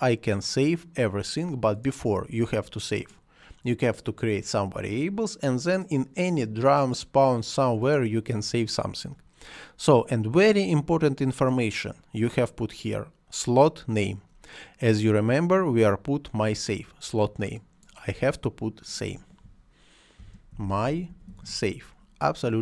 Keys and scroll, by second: 20.1-21.8 typing.